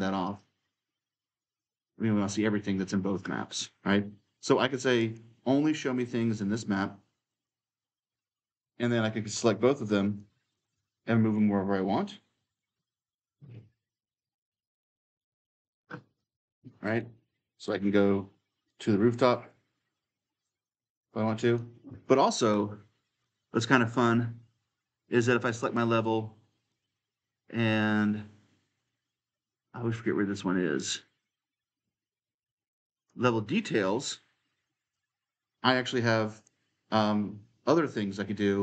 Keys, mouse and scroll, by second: 0.0-3.4 drag, 4.8-6.9 drag, 7.1-9.2 drag, 9.9 click, 10.3 ctrl+click, 11.0-12.1 typing, 11.2 right click, 11.4-14.1 drag, 13.4 d, 14.1 right click, 14.6-16.0 drag, 16.0-19.3 right drag, 16.1 s, 17.6 e, 18.1 s, 19.3 click, 20.2-23.0 right drag, 20.3-21.7 typing, 23.0-25.1 drag, 25.4-28.6 drag, 30.5-32.6 drag, 32.7-38.2 drag.